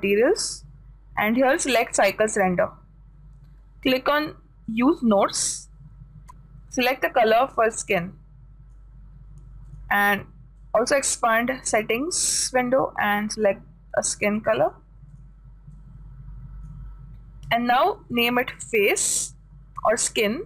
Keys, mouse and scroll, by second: 1.7-3.6 drag, 5.1-7.3 drag, 10.2-14.4 drag, 16.3-18.1 drag, 18.3-19.8 drag.